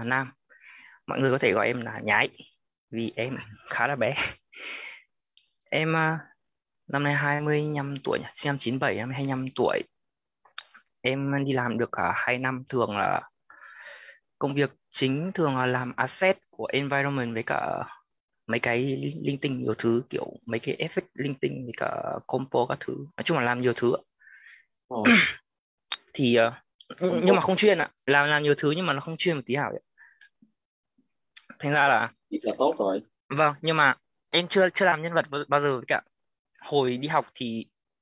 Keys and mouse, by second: 10.4 click, 11.8 9, 12.2 7, 12.8 ,, 13.3 space, 15.8-24.1 typing, 26.3-32.3 typing.